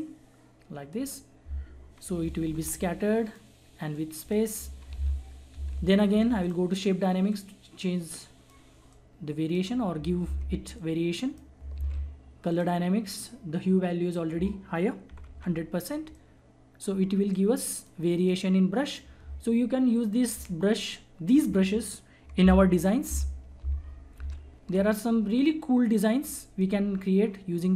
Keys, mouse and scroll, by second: 2.0 [, 2.2 [, 2.3 [, 2.4 [, 2.9-5.3 drag, 5.3 ctrl+z, 6.4-10.2 drag, 10.2 ctrl+z, 10.7 click, 11.8 ctrl+z, 12.5 click, 15.1 ], 15.3 ], 16.3-21.6 drag, 22.4 ctrl+Num_Lock, 22.4 click, 23.0 ctrl+z, 26.6 click.